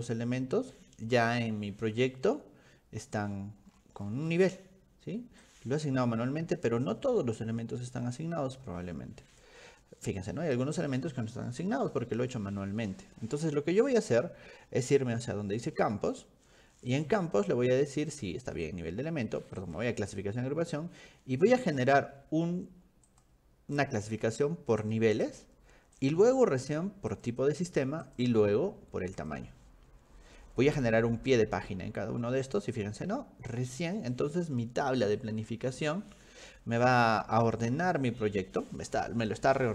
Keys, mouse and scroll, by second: 3.7-4.5 scroll down 6, 5.4 click, 6.1 scroll down 2, 6.2-9.5 drag, 17.0 click, 19.6 click, 21.7 click, 23.1 click, 24.9 click, 25.3 click, 26.0 click, 27.1 click, 28.0 click, 29.2 click, 32.6 click.